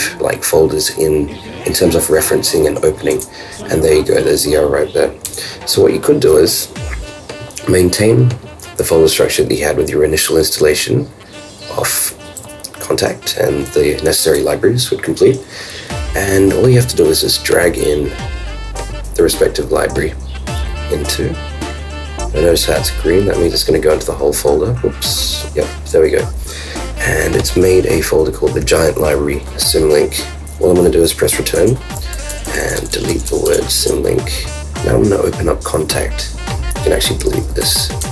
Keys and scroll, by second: 37.6 super+BackSpace.